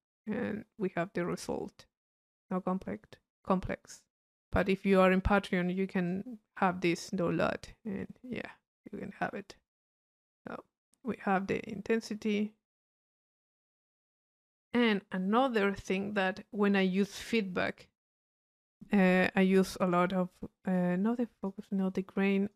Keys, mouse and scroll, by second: 1.2-3.9 middle drag, 3.9 click, 5.8 click, 9.7-13.6 drag, 19.6-21.0 drag, 21.1-22.5 drag.